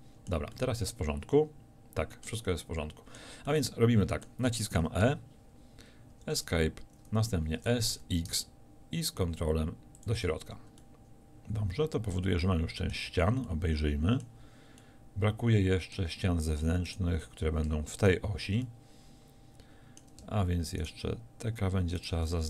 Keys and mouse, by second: 2.6-5.1 drag, 5.1 e, 7.6 s, 10.1 click, 11.0 middle click, 13.2 z.